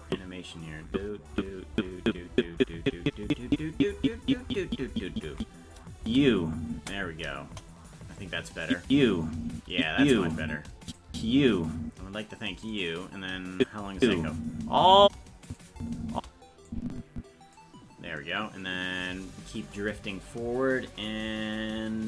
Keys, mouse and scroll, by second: 0.1 Right, 0.9-3.5 Left, 4.0-5.1 Left, 6.0 space, 7.5 KP_0, 8.7 click, 8.8 space, 9.7 click, 9.9 space, 10.8 click, 11.1 space, 12.8 right click, 13.5 click, 13.9 space, 15.4 click, 15.7 space, 16.7 click.